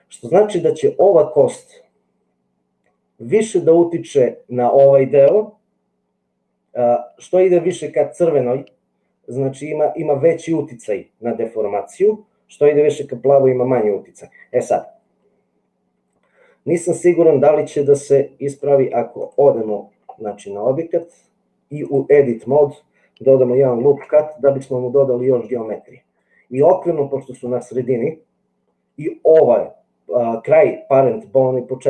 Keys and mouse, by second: 18.0 click, 21.1 click, 23.7 ctrl+r.